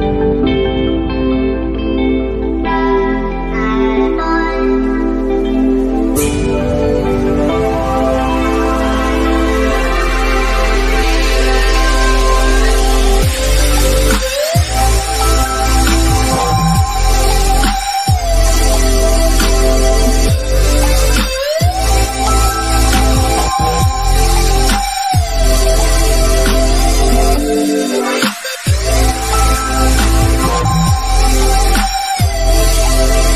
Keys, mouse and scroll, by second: 0.1 click, 2.7 Down, 7.5 Down, 8.9 click, 9.3-9.6 scroll down 1, 10.1 middle click, 10.8 scroll down 1, 19.3-19.8 scroll up 1, 21.7-22.1 scroll down 1, 22.1 middle click, 22.7-23.2 scroll down 1, 23.3-25.3 shift+middle drag, 25.3-25.7 scroll up 1, 25.7 middle click, 26.9 scroll down 1, 27.2 middle click, 29.1 click, 32.4 click.